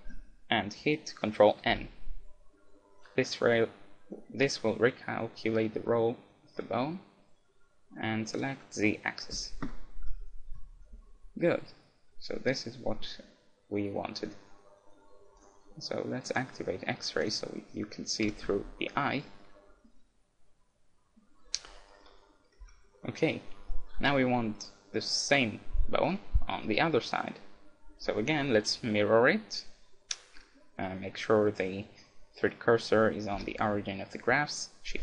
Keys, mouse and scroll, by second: 1.7 ctrl+n, 10.0 KP_1, 10.5 KP_Decimal, 11.2-14.3 middle drag, 15.4-19.1 drag, 18.3 z, 18.5-21.1 middle drag, 21.9-23.6 middle drag, 22.6 KP_1, 23.7-26.4 middle drag, 30.9-32.9 middle drag, 33.4 shift+c.